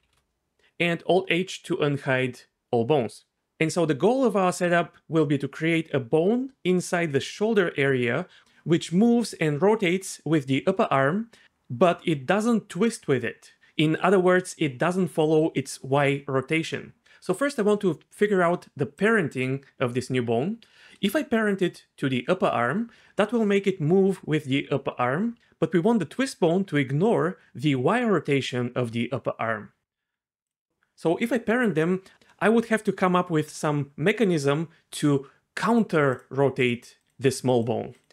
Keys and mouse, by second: 1.9 alt+h, 19.0 click, 19.3 click, 30.5 click, 36.1 click, 36.6 click, 37.5 click.